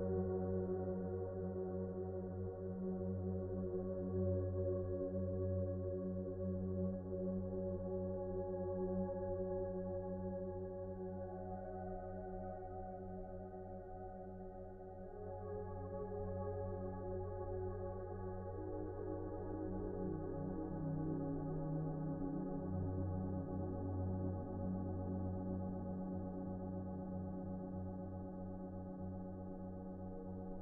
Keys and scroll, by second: 16.8 c.